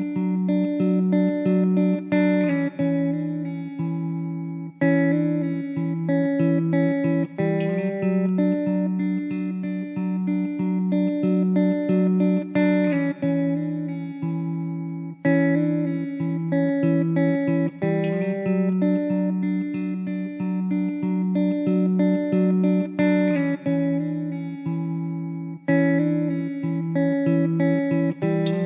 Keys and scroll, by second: 5.7 Tab, 10.8 Tab, 12.6 l, 13.3 `, 14.5 r, 15.9 Tab, 16.2 Tab, 18.7 shift+d, 20.7 Tab, 27.4 ctrl+z, 27.8 s.